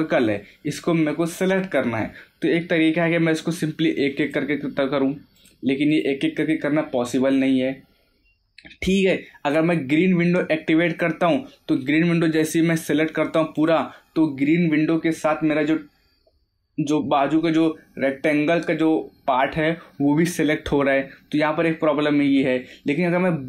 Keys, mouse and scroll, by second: 4.2 click, 10.8 click, 13.5 click.